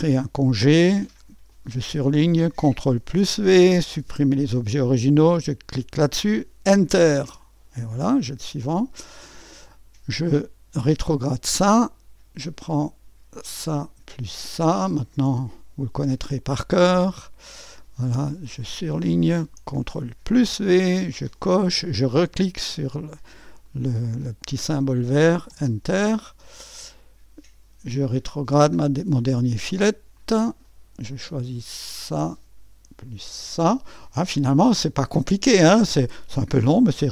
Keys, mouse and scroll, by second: 0.0 click, 0.5-2.0 drag, 3.0 ctrl+v, 3.9 click, 5.7 click, 7.3 Return, 8.2 click, 9.1-11.2 drag, 11.5-13.5 drag, 13.7-14.9 drag, 15.1-16.9 drag, 17.1-19.7 drag, 20.3 ctrl+v, 21.4-25.5 drag, 25.5 Return, 26.2-32.8 drag, 33.7-37.1 drag.